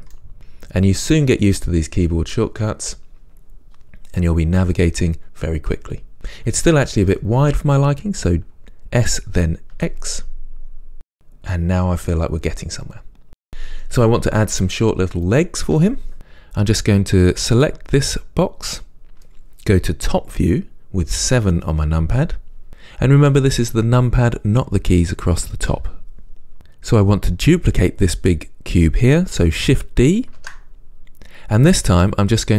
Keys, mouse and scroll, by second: 0.3-11.3 middle drag, 9.3 s, 11.3 click, 14.1-17.8 middle drag, 17.8 click, 21.5 KP_7, 30.6 shift+d.